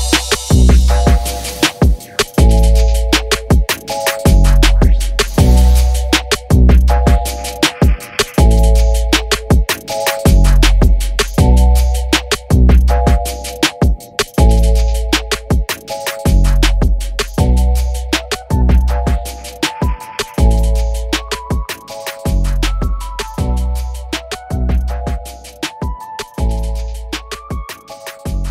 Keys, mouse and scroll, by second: 0.0 ctrl+space, 1.1 scroll down 1, 1.5 scroll up 1, 5.0 a, 5.2 s, 6.8 r, 8.0 s, 8.9 g, 9.6-10.0 scroll up 1, 10.0 KP_Decimal, 10.6 scroll down 1, 10.6 /, 11.1 middle click, 11.5 z, 11.8 scroll down 2, 11.9 scroll up 1, 12.0-14.2 middle drag, 14.2 s, 16.5 click, 17.1 g, 18.2 Tab, 18.7 alt+a, 19.1 click, 19.3 scroll down 1, 19.5 alt+a, 19.6-20.1 scroll up 1, 20.1 scroll down 1, 20.2-20.5 scroll up 4, 20.5-22.1 middle drag, 22.7 click, 22.7 scroll down 1, 22.9-24.1 middle drag, 24.1 scroll up 1, 24.3 scroll down 1, 24.5-24.8 scroll up 1, 24.8-25.4 middle drag, 25.4 g, 26.6 alt+h, 27.2-27.6 middle drag, 27.6 scroll down 2, 27.7 shift+middle click, 27.8 scroll up 1, 28.0-28.3 middle drag, 28.3 alt+a, 28.4-28.5 drag.